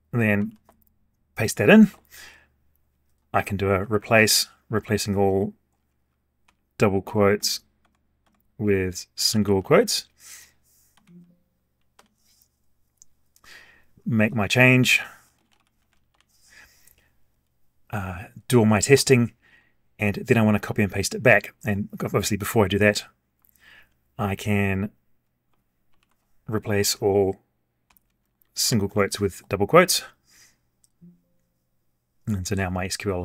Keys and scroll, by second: 0.4 ctrl+v, 3.8 ctrl+r, 10.9 alt+a, 25.9 ctrl+r.